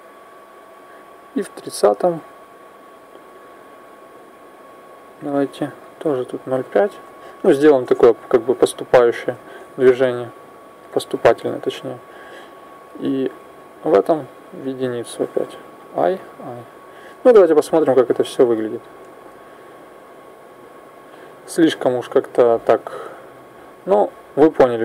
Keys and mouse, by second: 0.5-2.4 drag, 2.9-4.9 drag, 5.8 click, 10.2 i, 10.7 i, 11.8 click, 13.7 click, 15.5 i, 15.9 i, 17.1-19.0 drag, 18.8 alt+a, 22.7 click, 24.7-24.8 drag.